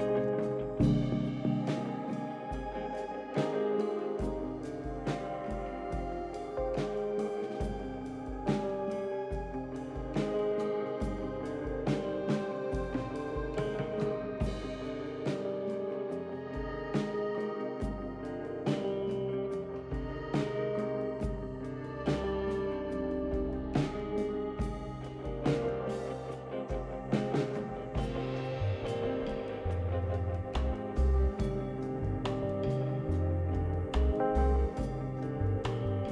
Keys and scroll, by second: 3.7 space, 3.8 t, 9.5 typing, 21.0-21.8 typing, 25.7 typing, 28.1 ctrl+d, 29.1 ctrl+d, 30.9-31.7 typing, 35.5 ctrl+d.